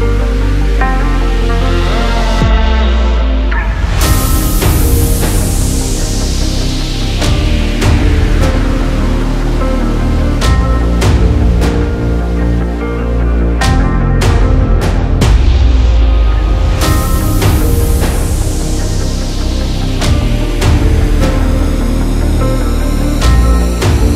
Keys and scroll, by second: 13.6 ctrl+z.